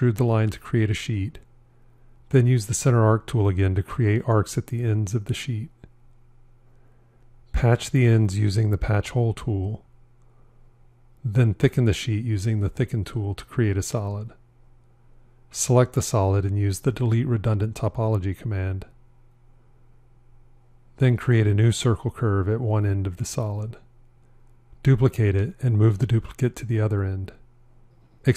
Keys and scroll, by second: 0.0 e, 17.4 f.